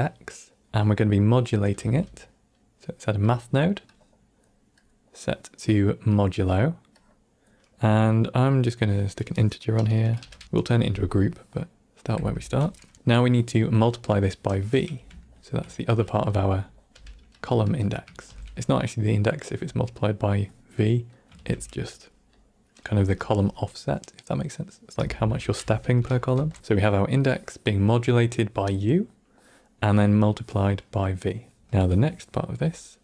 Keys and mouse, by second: 1.7 q, 3.8-4.3 drag, 4.7-6.1 drag, 6.9-7.4 drag, 8.7-11.8 drag, 11.9 click, 12.1 F2, 12.9 middle click, 14.5-14.9 drag, 15.2 ctrl+middle click, 15.7 middle click, 16.8 g, 17.6 click, 18.2 shift+d, 18.5-19.2 drag, 21.1 click, 21.3 shift+d, 22.3 click, 24.9 F2, 26.6 ctrl+middle click, 31.6 ctrl+click, 32.0-32.4 middle drag.